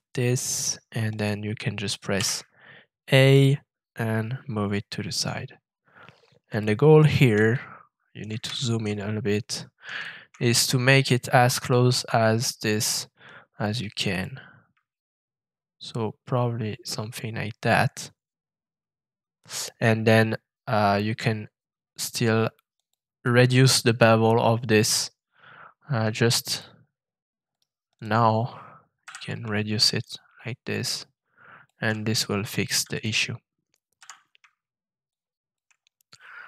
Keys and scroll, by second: 2.1 a, 29.0 f, 33.9 f.